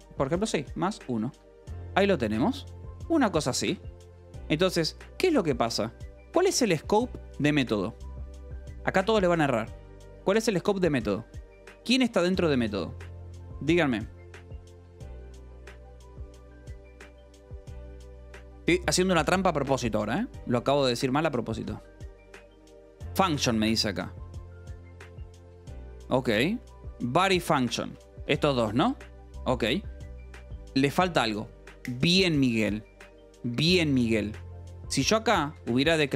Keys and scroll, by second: 0.0-1.1 typing, 1.2 Escape, 2.6 k, 3.3 j, 3.9 Escape, 4.1 k, 7.2 shift+v, 11.8 Escape, 12.5 shift+v, 22.0 Escape, 23.1 j, 24.2 Escape, 24.3 k, 27.3 j, 28.5 j, 28.7 Escape, 32.7-36.1 typing.